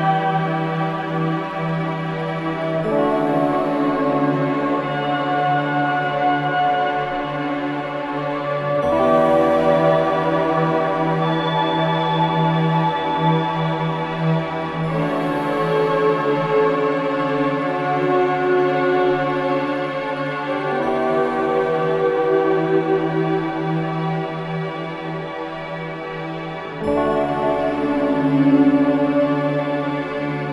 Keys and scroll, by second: 16.8 space, 23.0 space.